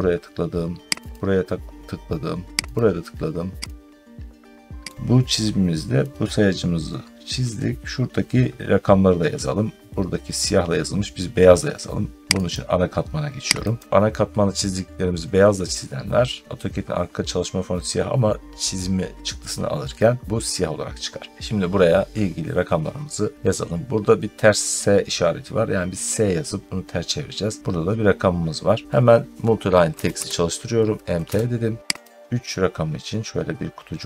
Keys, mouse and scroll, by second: 1.0 click, 2.6 click, 3.6 click, 4.9 middle click, 4.9 scroll, 9.1-9.4 scroll, 9.6 scroll down 1, 9.7 scroll, 9.9 scroll down 1, 12.4 click, 12.4 scroll, 13.6 click, 21.0 middle click, 21.3 middle click, 28.0 scroll down 1, 28.1 middle click, 28.5 middle click, 28.6 middle click, 29.5-30.5 typing, 31.1 Return, 31.3 scroll down 2, 31.9 click.